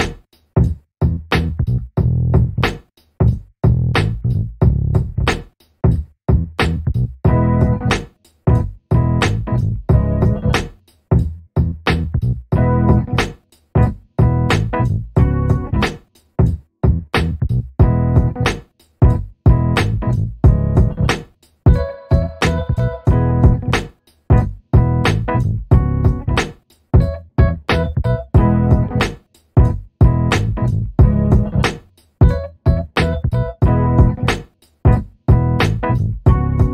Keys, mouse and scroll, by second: 0.1 alt+click, 2.2 scroll down 1, 3.6 middle click, 4.0-4.4 scroll down 1, 4.9 alt+click, 8.0 middle click, 8.7 alt+click, 9.4 alt+middle click, 9.7 alt+click, 12.1 alt+middle click, 12.9 click, 14.8 alt+middle click, 19.5 alt+click, 19.9 alt+middle click, 26.3 alt+scroll down 1, 26.6 alt+middle click, 27.0 alt+click, 30.3 middle click, 30.7 alt+click, 34.5 alt+middle click, 35.7 click, 36.1 alt+middle click.